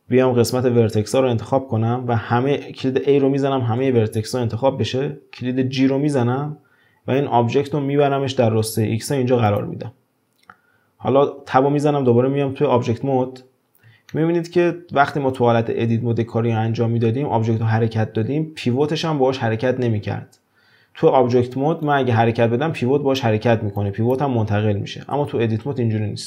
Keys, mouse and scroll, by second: 0.9 1, 3.8 a, 5.7 g, 12.7 Tab, 14.1-17.1 shift+middle drag, 21.8-25.2 drag, 25.2 ctrl+z, 25.7 ctrl+z.